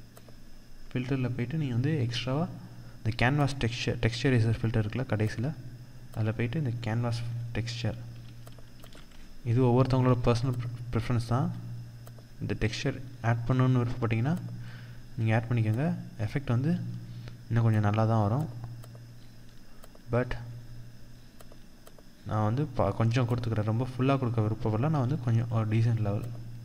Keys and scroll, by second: 7.7 ctrl+-, 24.4 ctrl+0, 25.2 ctrl+=.